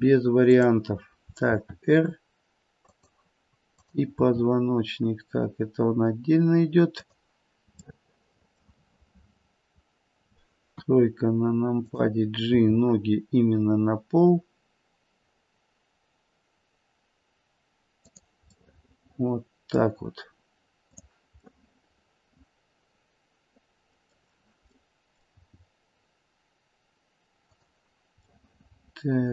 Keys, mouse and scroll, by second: 0.4 click, 1.5 r, 3.7 click, 4.3 r, 7.8 middle click, 8.8 middle click, 8.8-10.7 scroll down 3, 10.7 KP_3, 11.7 click, 12.5 g, 18.6 middle click, 19.6 middle click, 20.8 click, 21.5 middle click, 24.7 middle click, 25.3 g, 28.2 middle click.